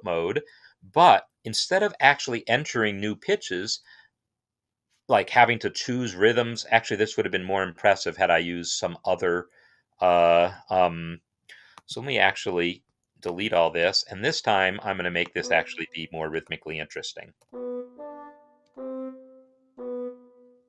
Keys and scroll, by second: 7.1 Escape, 13.6 BackSpace, 16.2 typing, 19.4 typing.